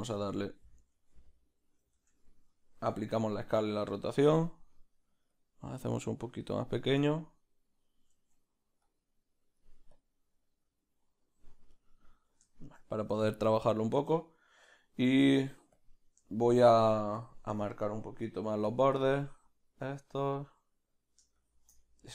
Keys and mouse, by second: 0.9 ctrl+z, 2.8 Tab, 2.8-8.2 drag, 3.8 ctrl+a, 8.2 ctrl+z, 8.9-11.8 drag, 11.8-17.2 middle drag, 15.8 b, 17.2 click, 18.9 click, 20.9 middle click, 21.4 shift+click, 21.8 middle click.